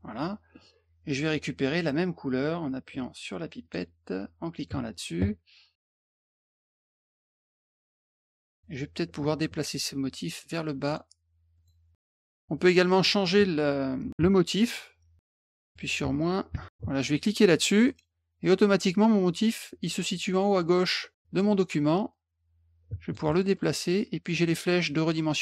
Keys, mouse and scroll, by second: 3.6 click, 4.6 click, 6.4 click, 8.5 click, 10.8 click, 11.5 click, 11.9 click, 12.3 click, 15.2 middle click, 17.8 click, 20.6 click, 22.1-23.1 drag, 23.3 scroll up 2, 23.6 middle click.